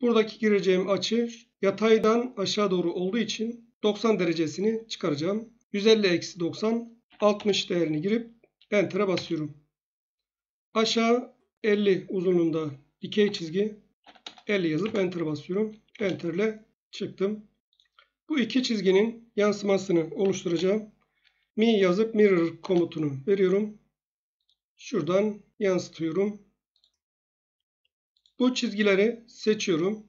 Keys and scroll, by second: 7.0 typing, 9.1 Return, 13.2 F8, 13.7-14.5 typing, 14.8 Return, 15.9 Return, 20.0-20.7 typing, 22.6 Return.